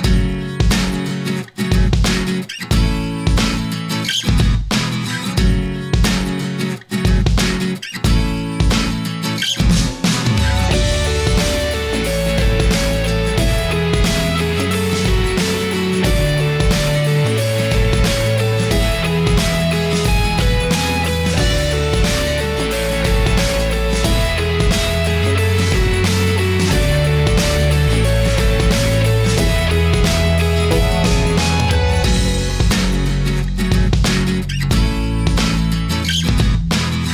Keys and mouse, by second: 0.1-1.2 drag, 1.2 middle click, 3.2 middle click, 4.5-6.6 drag, 8.1-9.7 middle drag, 21.4-24.2 middle drag, 25.5 middle click, 26.5-28.1 middle drag, 28.7-30.6 middle drag, 31.7-34.1 drag, 34.7-36.1 drag.